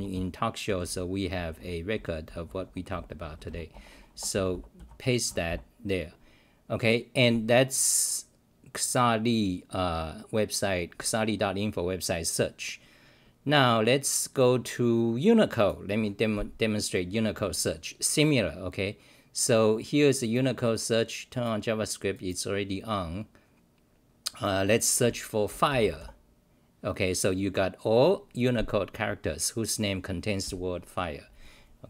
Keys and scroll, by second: 0.0-5.2 typing, 3.7 Return.